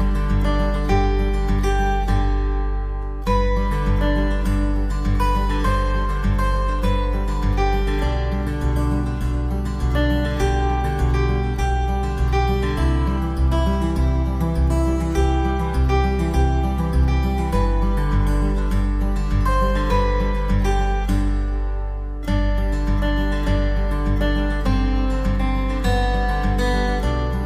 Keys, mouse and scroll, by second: 0.5 click, 2.4 ctrl+s, 2.8 middle click, 3.4 Tab, 3.9 middle click, 4.5-5.1 scroll up 3, 6.4 click, 7.5 click, 8.0 click, 9.4 KP_7, 10.2 shift+middle click, 11.0-11.4 scroll up 3, 11.9 shift+right click, 13.6 shift+right click, 15.7 middle click, 16.5 shift+middle click, 17.8 shift+right click, 21.3 x, 23.7 shift+middle click, 27.2 click.